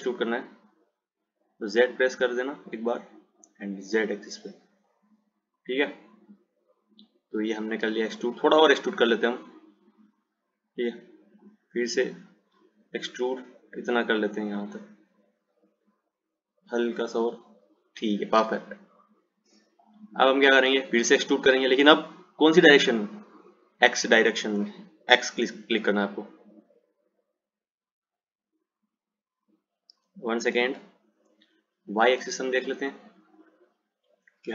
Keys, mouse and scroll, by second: 6.1 click, 9.5 click, 12.1 click, 19.7 click, 23.6 click, 30.8 ctrl+z, 32.8 click.